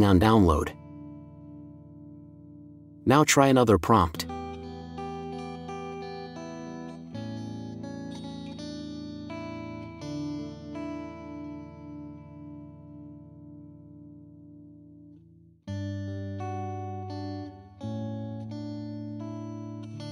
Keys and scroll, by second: 4.8 ctrl+v, 5.9 Left, 9.6-11.9 typing.